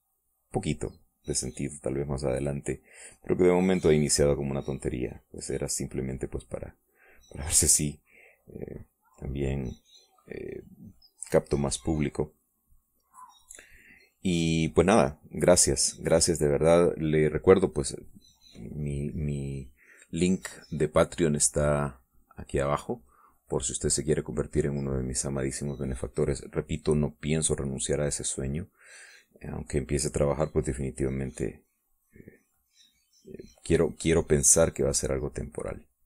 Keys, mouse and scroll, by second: 3.0-4.0 drag, 4.6-11.8 drag, 12.4-14.2 drag, 14.5 click, 15.2 click, 16.0-18.5 drag, 18.6-19.7 drag, 19.7 click, 21.2-31.8 drag, 32.1-36.0 drag.